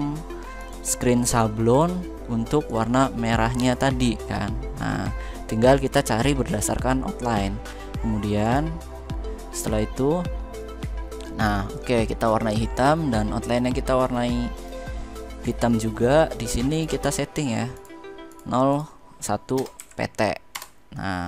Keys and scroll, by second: 19.3 BackSpace, 19.5 1, 20.2 Return.